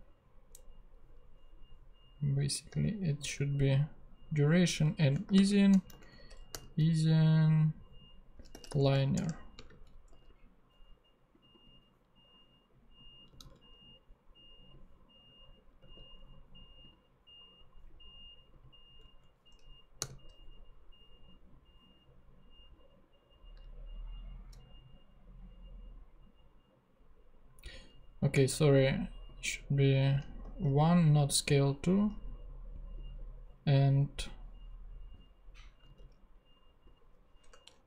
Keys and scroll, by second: 3.0 shift+super+/, 4.8 super+v, 5.2 shift+super+;, 5.9 alt+shift+space, 5.9 alt+shift+Right, 6.5 alt+., 7.2 ., 8.5 |, 8.7 n, 9.1 Return, 9.6 space, 9.7 Right, 10.1 ;, 13.4 super+c, 15.8 super+v, 19.0 Right, 19.9 ,, 35.8 super+c, 37.4 BackSpace.